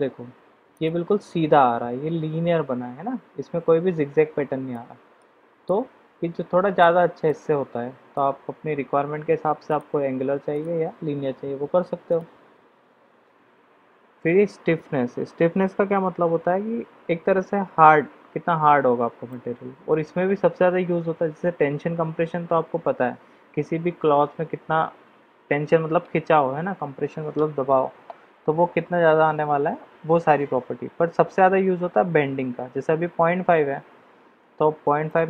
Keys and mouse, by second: 0.8 click, 4.7-5.2 middle drag, 5.6-6.8 middle drag, 7.2-8.1 middle drag, 9.7 click, 19.3-20.0 middle drag, 35.1 click.